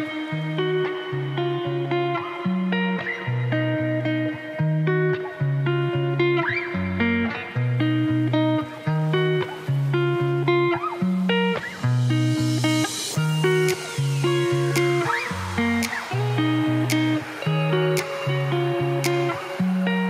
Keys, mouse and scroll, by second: 0.6 click, 1.7 o, 2.2 BackSpace, 2.7 o, 3.6 Tab, 4.0 click, 4.6 Tab, 4.8 ctrl+s, 6.2-7.4 right drag, 8.4 ctrl+s, 8.6-11.6 drag, 15.8 ctrl+shift+t, 19.6 scroll, 19.8-20.0 middle drag.